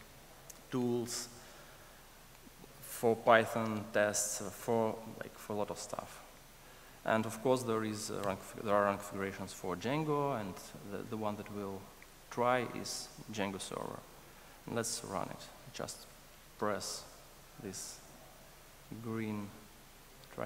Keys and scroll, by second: 17.1 ctrl+r.